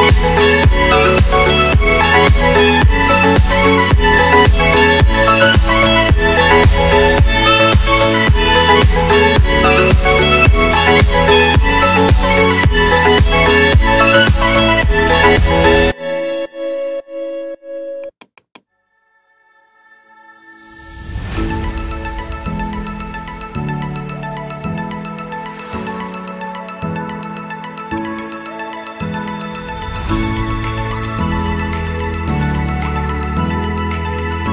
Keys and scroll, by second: 1.6 shift+Home, 2.2-5.1 typing, 4.1 Caps_Lock, 7.0 space, 19.8 shift+s, 20.0 m, 21.7 Return, 21.9-25.1 typing, 23.2 Return, 26.6 space, 29.2 ctrl+k.